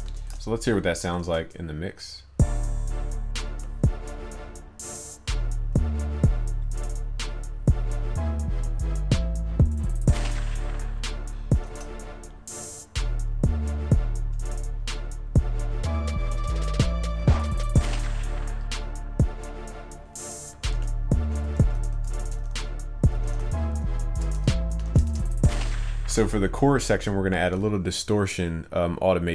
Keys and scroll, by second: 1.3 ctrl+s, 11.7 ctrl+s.